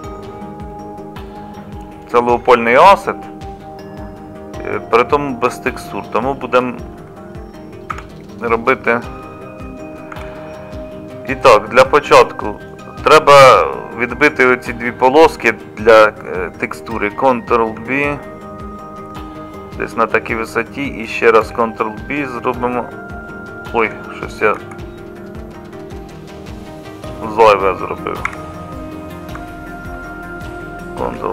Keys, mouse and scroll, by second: 7.9 Tab, 10.1 ctrl+r, 17.8 ctrl+b, 21.4 ctrl+b, 24.6 ctrl+z, 28.3 2, 31.0 ctrl+b.